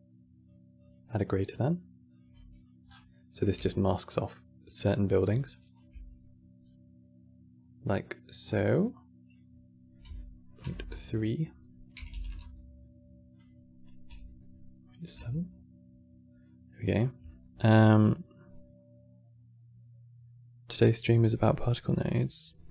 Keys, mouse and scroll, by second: 0.5-2.3 drag, 2.6 scroll down 8, 2.8 middle click, 3.3 g, 5.5 ctrl+shift+click, 6.3-6.8 scroll down 2, 7.8 middle click, 8.1-8.8 scroll up 8, 9.0-10.3 drag, 10.3 KP_3, 10.5 KP_Enter, 13.1-16.1 drag.